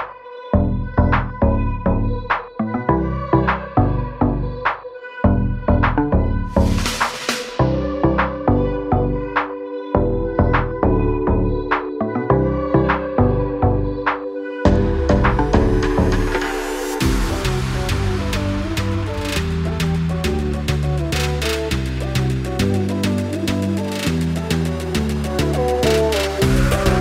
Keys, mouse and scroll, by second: 6.9 click, 11.5 click, 18.6 click, 21.6 click, 23.0 BackSpace, 24.0 click.